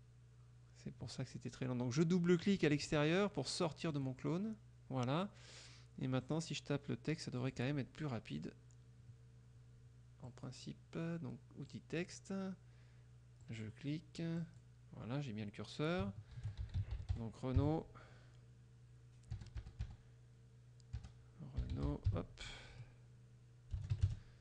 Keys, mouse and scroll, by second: 2.5 click, 4.0 click, 6.3 click, 7.5 click, 10.3 click, 11.7 click, 13.5 click, 14.5 click, 16.2-18.2 typing, 19.5 BackSpace, 21.0-22.6 typing, 23.8-24.4 typing, 24.0 KP_Subtract.